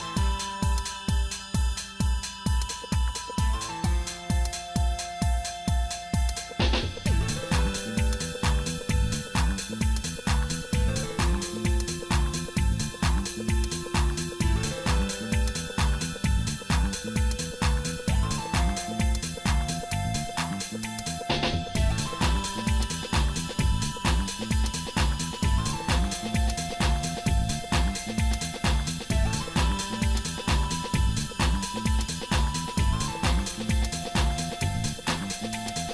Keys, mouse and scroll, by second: 6.8-10.6 drag, 12.1 click, 26.2 click, 32.9 scroll up 2.